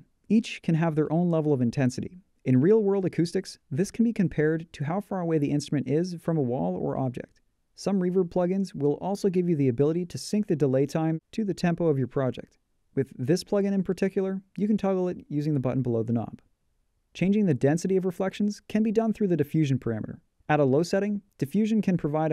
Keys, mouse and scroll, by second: 11.0 click, 13.0 click.